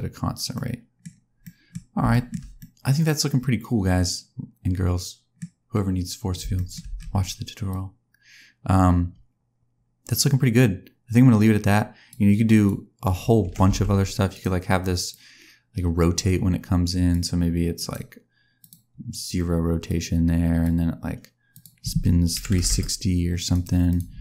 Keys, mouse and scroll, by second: 0.5 middle click, 0.9-1.5 scroll down 3, 1.4 middle click, 2.0 shift+middle click, 2.5 middle click, 5.5-6.1 scroll up 2, 6.1 scroll down 2, 6.5 shift+middle click, 6.8 space, 6.9 scroll down 1, 7.6 click, 12.4 click, 13.4 r, 15.0 click, 18.6 right click, 19.8 click, 21.4 click, 23.9 right click, 24.1 space.